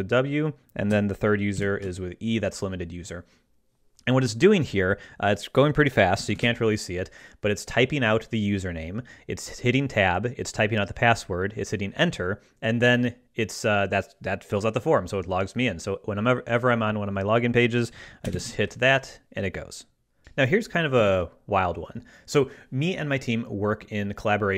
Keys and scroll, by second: 1.5 ctrl+alt+super+e, 6.3 ctrl+alt+super+q, 6.4 ctrl+alt+super+s, 18.3 ctrl+alt+super+w, 20.2 ctrl+Left.